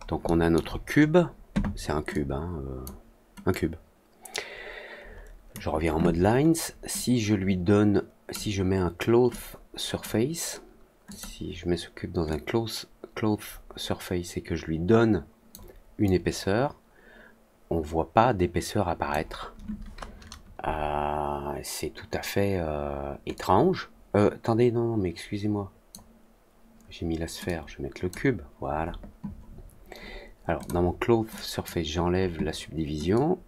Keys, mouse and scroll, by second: 0.2 alt+middle drag, 2.0-2.8 drag, 3.4-5.4 drag, 6.9-8.2 drag, 9.2 click, 11.0 click, 12.2-15.4 drag, 16.0-19.0 drag, 23.3-25.8 drag, 27.4 click, 30.5 click, 31.3 click, 33.1-33.4 drag.